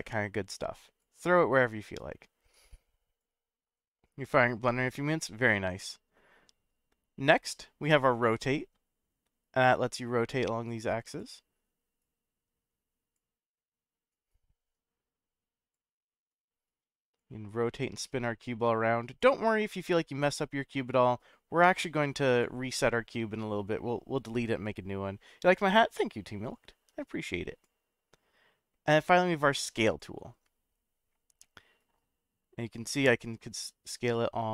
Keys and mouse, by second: 2.0-3.2 drag, 8.1-11.2 drag, 12.0-13.2 drag, 14.3-15.7 drag, 16.7 click, 18.0-19.2 drag, 20.8-22.4 drag, 22.8-27.6 drag, 30.0-34.5 drag.